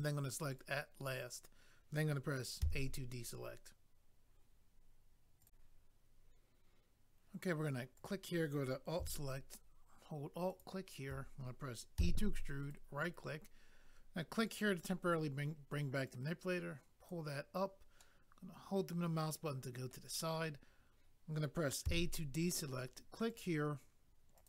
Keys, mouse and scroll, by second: 0.5 click, 8.0 click, 8.1 click, 10.5 alt+click, 10.6 alt+click, 11.9 e, 12.6 right click, 12.7 right click, 14.5 click, 14.6 click, 18.0 middle click, 21.8 a, 23.3 click, 23.4 click, 24.4 click.